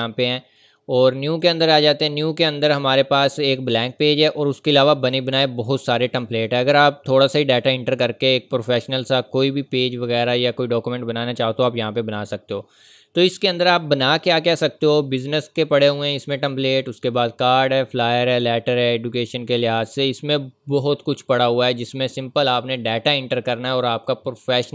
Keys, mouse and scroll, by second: 1.3 click, 4.2 scroll down 1, 6.7-7.0 scroll up 1, 8.7 scroll down 1, 10.7 scroll up 1, 21.7 scroll down 1, 22.4 scroll up 1.